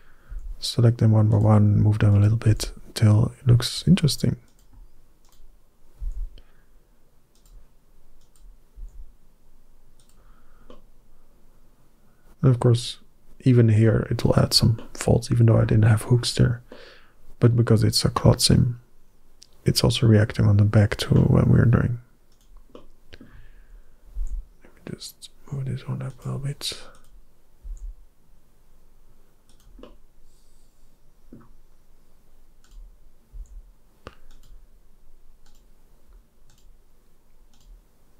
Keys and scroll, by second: 0.1 g, 2.3 g, 5.8 g, 8.6 g, 24.0 g, 27.5 g, 33.1 g.